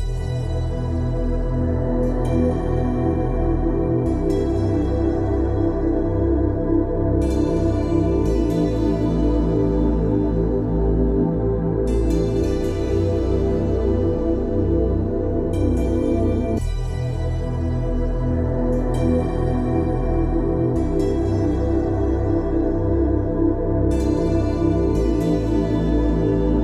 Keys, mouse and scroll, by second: 3.4 click, 8.4 typing, 9.2 Return, 10.6 click, 11.8 ctrl+space, 11.9 ctrl+click, 12.3 ctrl+space, 13.0 click, 13.3 space, 14.5 ctrl+space, 14.6 ctrl+click, 15.0 ctrl+space, 15.2 click, 15.6 space, 16.4 ctrl+space, 16.5 ctrl+click, 16.8 ctrl+space, 19.5 click, 21.9 Up, 23.7 click.